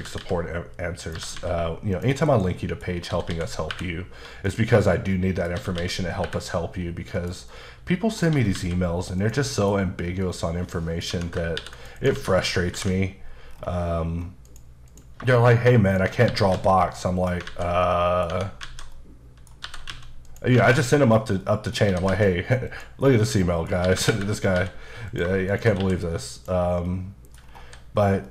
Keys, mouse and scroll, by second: 0.0-3.7 typing, 1.0 click, 1.9 click, 2.6 middle click, 2.9 scroll down 2, 4.5 click, 4.7 middle click, 5.6-6.3 typing, 7.1 click, 7.5 middle click, 8.3 typing, 9.2 click, 9.5 middle click, 10.1 middle click, 11.1 Tab, 11.6 ctrl+r, 11.7 click, 12.0 right click, 12.1 alt+z, 12.7 ctrl+b, 13.5-14.5 scroll down 5, 14.5 click, 14.9 click, 15.9 shift+click, 16.3 g, 16.5 z, 17.2 click, 17.5 alt+z, 17.8 middle click, 18.3 Tab, 18.9 middle click, 19.6 typing, 20.2 click, 20.6 alt+z, 20.7 middle click, 21.9 typing, 22.7 click, 23.0 middle click, 23.8-24.6 typing, 25.1 click, 25.5 shift+click, 25.8 q, 26.4 click, 26.9 middle click, 27.4-28.3 scroll down 5, 27.6 h.